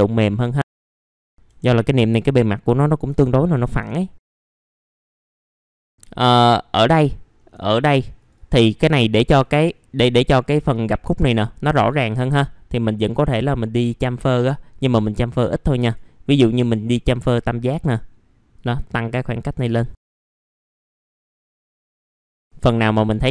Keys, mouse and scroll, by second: 0.3 middle click, 0.5-0.9 scroll down 1, 0.9 middle click, 1.2-1.9 scroll up 2, 3.1 alt+middle click, 4.1 right click, 4.4 click, 4.6 alt+middle click, 4.9 middle click, 5.0-5.7 typing, 5.5 scroll up 1, 5.7 middle click, 6.1 scroll down 1, 6.4 middle click, 7.0 scroll up 1, 7.5-8.1 scroll up 1, 8.1 click, 10.2 ctrl+click, 10.4 ctrl+click, 11.7 right click, 13.2 click, 14.0-14.8 scroll up 1, 15.8-19.9 drag, 20.6 middle click, 20.7 scroll down 1, 21.1 right click, 21.4 click, 21.6 middle click, 21.9 scroll up 1, 22.1 middle click, 22.4 click.